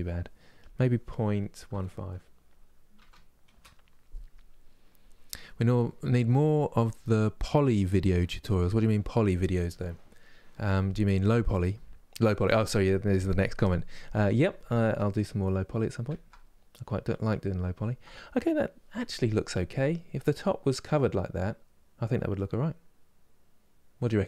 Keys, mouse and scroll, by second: 3.2-13.7 drag, 13.7-22.1 middle drag.